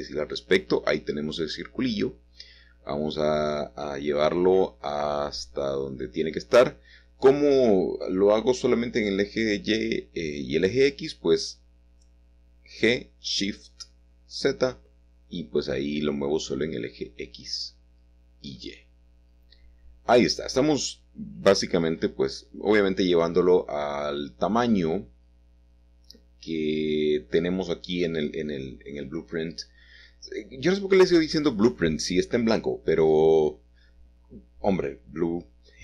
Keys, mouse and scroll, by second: 0.8 click, 1.3-2.2 scroll up 3, 1.4 middle click, 2.3 shift+middle click, 9.9 s, 11.8 click, 14.7-15.8 drag, 15.9 g, 17.5 Escape, 18.2 g, 18.4 y, 19.8-20.9 drag, 21.9 s, 24.7-25.8 drag, 27.3 s, 29.4-30.6 drag, 33.2 middle click, 33.6 middle click, 34.8 shift+middle click, 35.0 shift+right click, 35.3 shift+middle click, 35.4 shift+middle click.